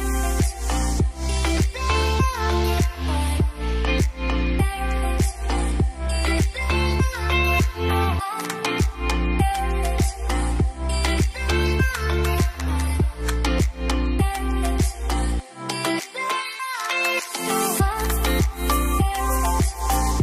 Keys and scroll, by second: 2.5 Delete, 4.1 u, 5.2 u, 7.7 Delete, 10.2-10.9 typing, 12.0 ctrl+s, 12.2 Return.